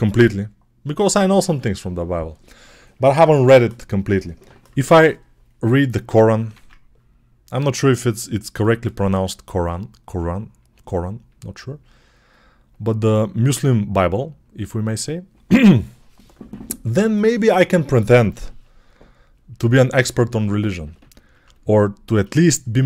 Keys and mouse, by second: 6.3 ctrl+Tab, 7.6-22.8 drag.